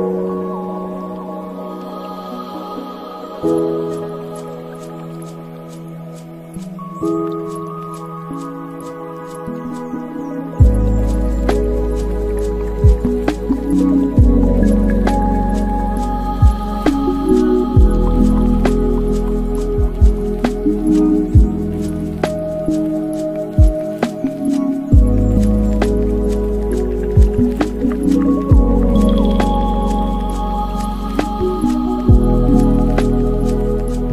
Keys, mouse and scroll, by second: 1.6 scroll up 2, 2.1-8.1 drag, 8.8-11.9 drag, 12.4-20.7 drag, 20.9-22.5 drag, 22.5 KP_5, 24.4-25.6 drag, 25.6 space.